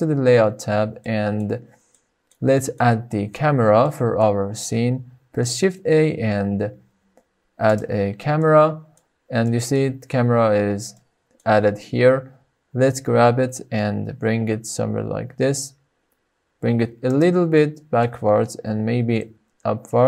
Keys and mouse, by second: 1.1 shift+middle click, 1.9-2.3 middle drag, 2.5 shift+middle click, 2.9 middle click, 4.0 middle click, 5.3 shift+a, 8.5 middle click, 9.4-9.7 shift+middle drag, 11.0 middle click, 12.8 g, 14.8 x, 17.1 click, 17.5-18.0 shift+middle drag, 18.6 g, 19.1 z.